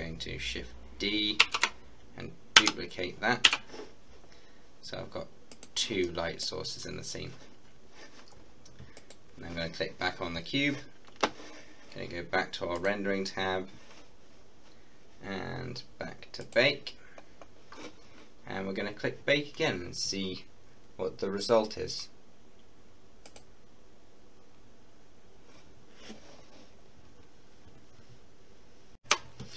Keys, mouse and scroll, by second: 1.5 shift+d, 2.6 x, 3.5 y, 5.6 click, 6.3 middle click, 6.7-8.2 scroll up 1, 9.0 click, 12.8 click, 16.4 click, 17.0-18.9 scroll down 1, 23.3 click, 29.0 F12.